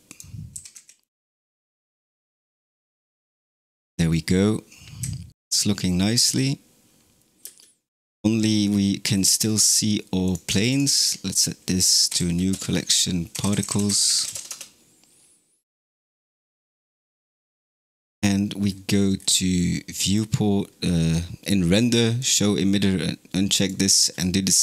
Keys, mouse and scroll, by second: 0.0 click, 0.5 g, 4.9 z, 7.5 space, 9.0-9.4 scroll down 9, 10.1 drag, 10.7 shift+click, 12.0 m, 14.6 Return, 16.5 click, 17.2-19.2 scroll down 22, 20.3 scroll down 1, 22.2 click, 23.5 click, 23.9-24.6 scroll down 4.